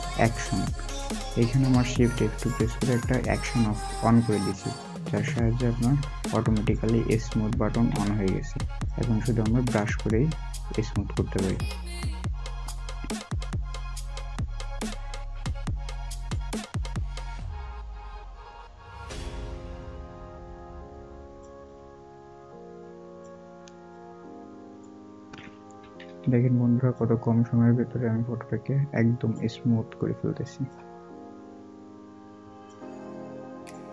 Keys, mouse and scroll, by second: 6.8-7.4 scroll down 1, 14.7 alt+scroll down 1, 16.5 scroll down 1, 25.7 ], 30.8-32.9 scroll down 1.